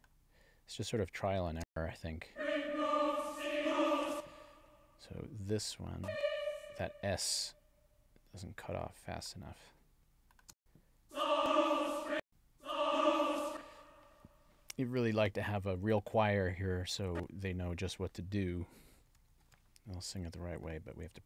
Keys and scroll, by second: 1.6 space, 4.0 space, 10.5 space, 13.4 space, 19.3 alt+Down.